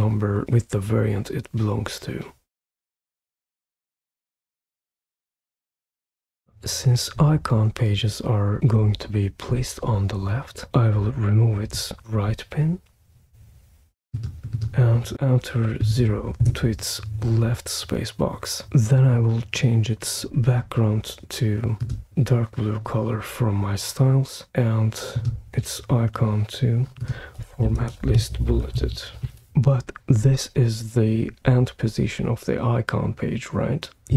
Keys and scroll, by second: 15.8 0, 16.4 Return, 27.2-29.2 typing.